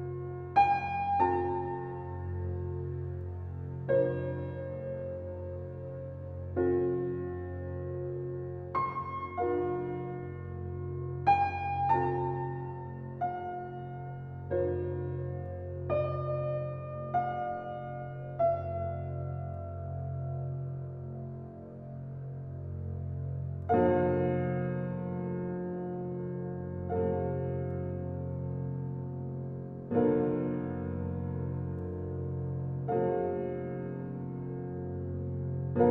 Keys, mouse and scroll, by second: 0.1-1.0 right drag, 1.0-2.2 middle drag, 2.2 scroll up 1, 2.6-3.8 shift+middle drag, 5.6-6.0 middle drag, 6.0 scroll up 1, 6.9-7.5 middle drag, 7.5 scroll up 1, 7.8-8.5 middle drag, 8.5 shift+scroll up 1, 8.9 click, 9.7 Tab, 10.1 scroll up 1, 10.6-11.8 middle drag, 11.8 ctrl+r, 14.5 shift+middle click, 14.8-15.5 scroll up 3, 15.5 click, 16.8 alt+click, 17.8 scroll down 1, 18.2 click, 18.6-20.6 drag, 20.6 scroll down 1, 20.9 drag, 22.8 click, 24.6 click, 27.2 alt+click, 28.3 alt+shift+click, 29.0 alt+shift+click, 29.7 click, 30.2-31.5 shift+middle drag, 31.5 Tab, 31.9 click, 32.5-33.5 drag, 33.9-34.9 middle drag, 34.9-35.3 scroll up 1, 35.3-35.7 shift+middle drag, 35.7-35.9 scroll up 2.